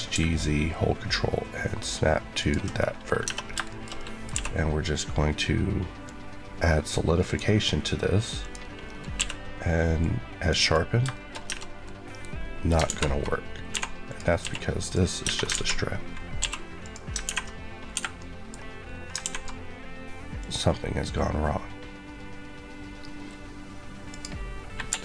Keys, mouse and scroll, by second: 2.3 ctrl+click, 3.1-3.6 scroll down 2, 3.6 shift+middle click, 4.2 q, 5.9 click, 8.8 scroll up 1, 9.1 q, 9.9 click, 11.0 shift+middle click, 11.3-12.6 shift+scroll up 3, 11.4 Tab, 12.6 alt+scroll up 1, 12.8 alt+z, 14.0 click, 14.3 q, 14.7 click, 15.1 Tab, 15.4 alt+z, 15.9-16.3 scroll down 1, 16.3 q, 16.7 click, 17.9 Escape, 18.1 middle click, 18.4 scroll up 1, 20.3 click, 24.0 click, 24.8 click, 24.8 Escape.